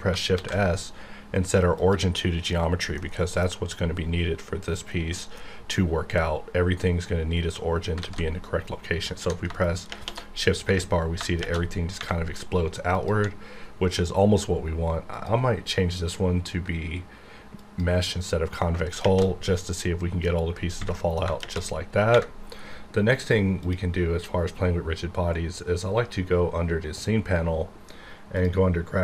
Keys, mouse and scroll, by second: 0.3 shift+s, 1.8 click, 2.7-3.0 scroll down 1, 3.0-5.1 middle drag, 8.0 alt+a, 9.9 shift+_, 10.9 scroll down 1, 11.4 shift+space, 12.9 click, 15.1 click, 17.6 click, 19.0 shift+space, 19.6 scroll down 2, 19.8-21.2 middle drag, 21.4 shift+space, 22.5-23.6 scroll up 1, 23.6 click.